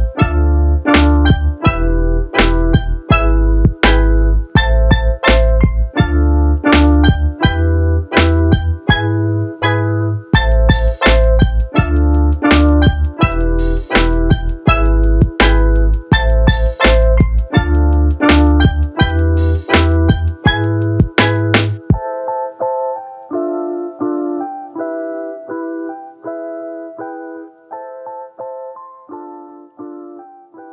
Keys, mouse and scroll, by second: 0.1 shift+click, 1.5 ctrl+KP_0, 2.9 click, 4.7-6.2 drag, 9.3 click, 11.1 middle click, 11.6 click, 12.2 click, 13.0 click, 14.1 shift+a, 17.8-18.4 drag, 19.6 drag, 24.1 click, 29.2-30.7 drag.